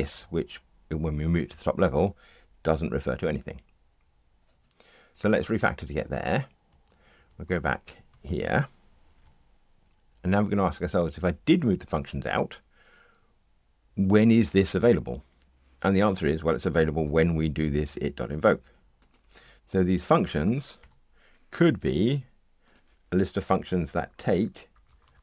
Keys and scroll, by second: 5.7 super+z, 7.6 super+z, 9.1 Escape, 20.7 Escape.